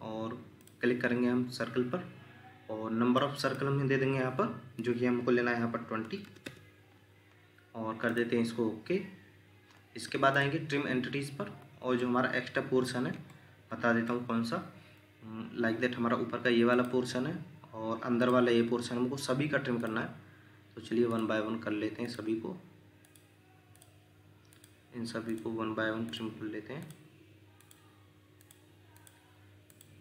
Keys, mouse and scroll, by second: 6.0 typing, 6.4 Return, 9.7 Escape, 10.0 Escape, 11.4 scroll down 1, 12.0 shift+middle click, 13.3 ctrl+middle click.